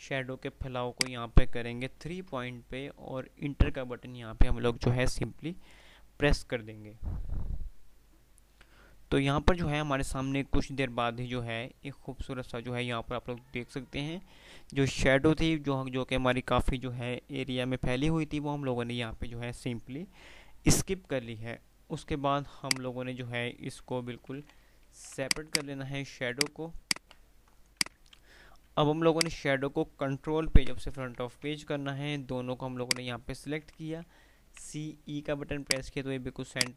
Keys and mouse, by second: 1.1 click, 22.7 click, 24.4 alt+a, 24.4 alt+s, 25.1 click, 25.2 click, 27.4 Delete, 27.8 click, 28.2 F3, 29.1 F2, 29.2 click, 29.5-30.1 F2, 30.5 shift+Page_Up, 33.1 shift+click, 34.2 typing, 35.7 click.